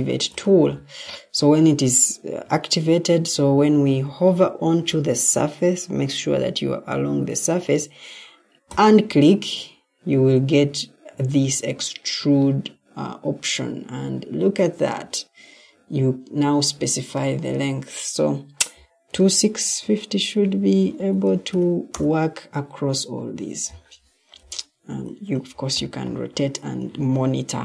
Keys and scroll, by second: 20.6-21.9 typing, 24.3 g.